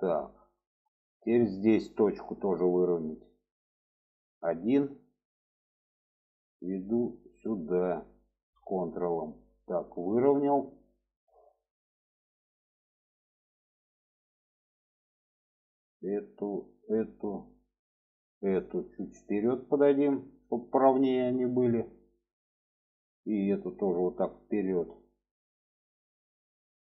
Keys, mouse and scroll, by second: 1.2 shift+middle click, 3.6 click, 4.1 1, 4.7 click, 5.7-9.0 drag, 9.5 shift+middle click, 10.3 shift+middle click, 15.7 click, 16.5 shift+click, 16.9 shift+middle click, 18.0 shift+click, 19.0-20.4 drag, 20.7 shift+middle click, 22.2 click, 22.9-25.0 drag, 25.9-26.8 middle drag.